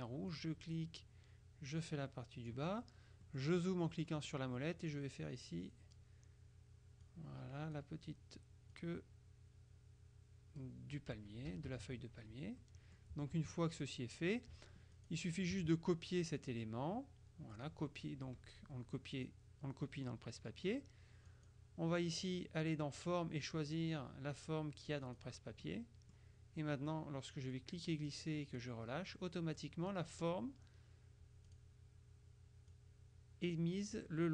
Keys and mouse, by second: 0.5-3.1 drag, 3.3-4.9 drag, 5.5 click, 7.1-8.3 drag, 8.8-11.2 drag, 11.6 KP_Subtract, 12.7-13.5 drag, 13.8 click, 15.1 click, 16.5 click, 17.6 click, 19.3 click, 21.4 click, 25.1 click, 27.6-29.1 drag, 31.5 click, 32.9-34.2 drag.